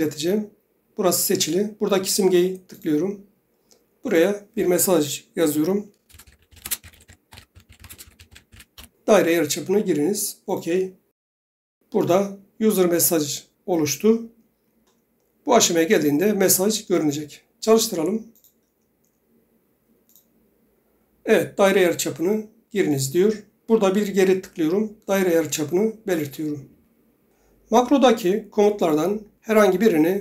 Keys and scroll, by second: 5.9-9.3 typing.